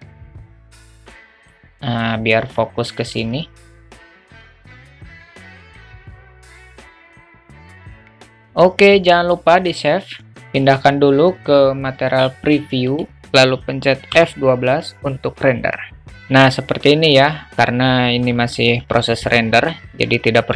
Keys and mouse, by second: 3.2 w, 3.7 w, 4.3 w, 4.3 q, 5.6 q, 6.8 drag, 7.0 drag, 7.5 drag, 8.0 drag, 12.9 click.